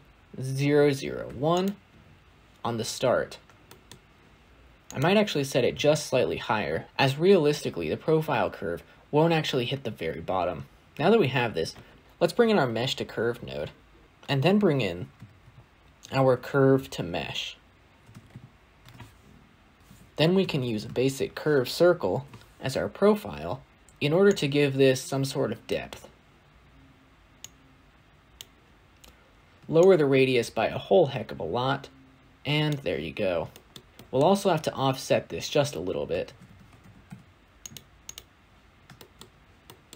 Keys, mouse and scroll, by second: 1.4 0, 2.8-3.5 scroll down 2, 3.5-14.0 shift+middle drag, 22.0 shift+a, 28.3 click, 29.8-33.0 shift+drag, 33.0-33.4 scroll down 1, 33.4 shift+middle click, 33.6-36.3 scroll up 3, 33.8 middle click, 36.3-36.9 scroll up 1, 36.9-37.6 scroll up 1, 37.6 shift+a, 38.8 shift+middle click, 39.1-39.8 scroll up 2.